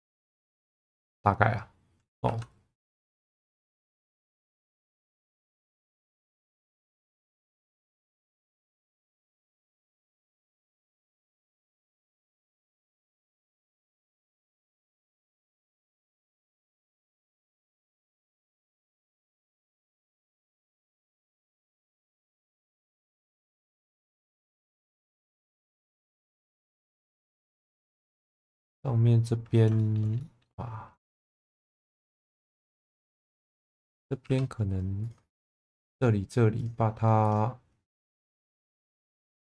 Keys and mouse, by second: 0.0 click, 0.5 click, 1.2 middle click, 2.3 2, 3.2 click, 4.0 ctrl+click, 4.5 shift+middle click, 6.0 e, 6.3 x, 6.9 click, 7.4 shift+middle click, 7.8 1, 8.5 g, 8.6 b, 9.7 click, 10.1 middle click, 10.4 1, 12.5 g, 12.6 b, 13.9 click, 14.4-15.8 middle drag, 16.5 click, 16.8 middle click, 18.3 click, 18.5 click, 18.6 click, 19.1 ctrl+z, 19.4 ctrl+z, 20.3 shift+Tab, 22.8 middle click, 23.8 shift+middle click, 24.8 shift+middle click, 25.3 middle click, 27.7 middle click, 29.8 shift+middle click, 30.2 middle click, 31.2 shift+middle click, 31.7 shift+middle click, 32.6 middle click, 33.4 shift+middle click, 34.2 2, 35.0 click, 36.6 shift+click, 37.2 shift+click.